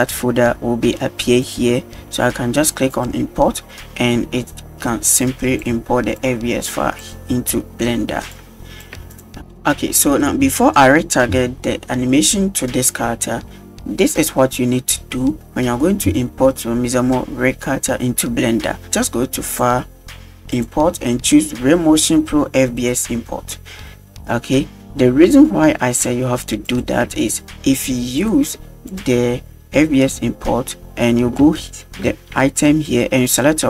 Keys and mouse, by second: 3.0 click, 5.3 click, 7.6 middle drag, 8.4 click, 9.0 x, 9.4-9.9 middle drag, 19.6-24.2 drag, 26.7 click, 28.3-30.7 drag, 31.7-32.1 shift+middle drag.